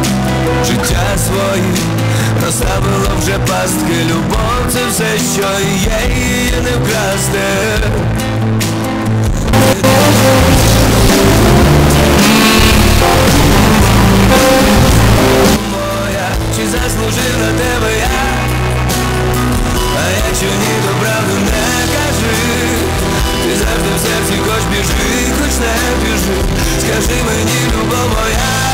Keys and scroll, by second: 16.4 Page_Down.